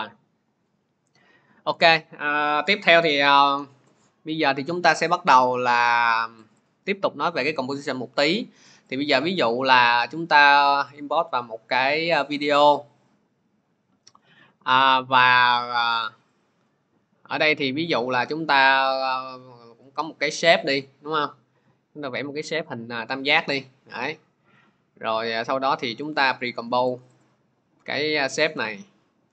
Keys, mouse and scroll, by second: 1.1 click, 6.4 click, 6.5 click, 8.8 click, 9.0 click, 12.3 click, 15.4 click, 16.3 click, 20.2 click, 22.0 click, 29.2-29.3 typing.